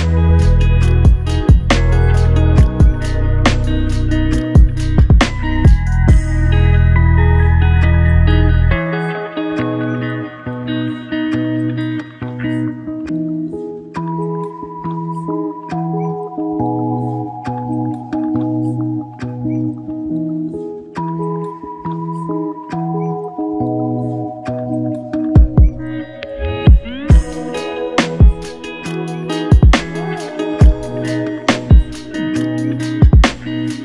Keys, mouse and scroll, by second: 0.9 alt+shift+click, 4.4 alt+click, 5.5 alt+click, 5.7 alt+shift+click, 6.3 f, 7.3 ctrl+click, 17.1 typing, 17.2 ctrl+i, 19.0 double click, 20.5 ctrl+alt+click, 27.0 alt+m, 29.8 f, 31.0 double click.